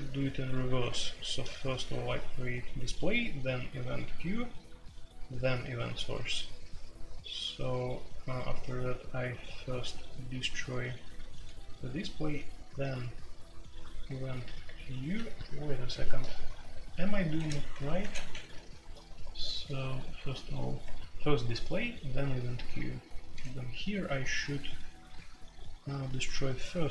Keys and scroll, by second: 0.4-1.6 typing, 5.9-6.4 j, 15.1-20.7 typing, 22.1-25.3 typing.